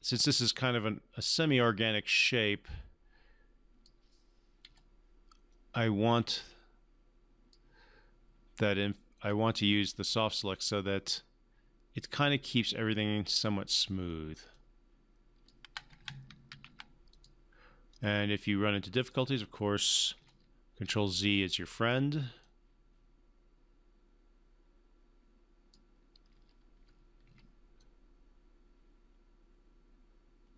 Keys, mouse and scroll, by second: 4.6 w, 5.5-7.7 drag, 10.7-13.4 drag, 16.5 ctrl+z, 17.1 click, 17.9-19.1 drag, 20.1 w, 20.8 e, 21.6 r, 22.4-25.8 drag, 26.0-27.7 typing, 27.8-30.5 drag.